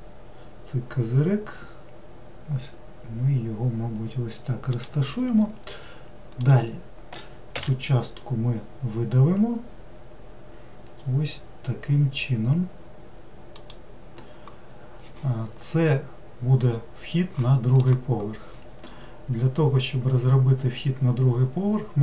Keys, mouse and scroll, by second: 6.4 click, 7.6 e.